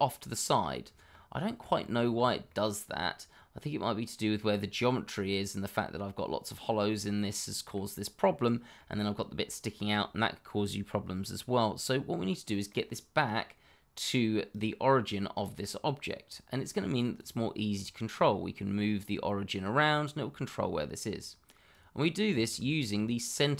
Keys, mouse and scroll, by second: 0.8 scroll down 1, 1.1 middle click, 1.9 shift+middle click, 2.1-2.4 scroll up 1, 2.4 middle click, 5.7 middle click, 10.0-10.4 scroll down 1, 10.4 middle click, 14.5 click, 16.6 click, 21.7 click, 22.2-22.6 scroll up 1, 22.6 shift+middle click.